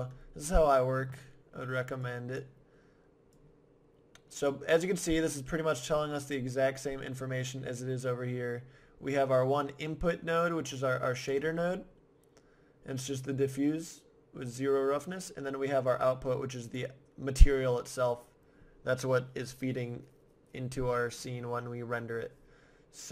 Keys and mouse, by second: 2.0-5.2 drag, 9.2-11.0 drag, 11.6-15.9 middle drag, 15.9-17.8 drag.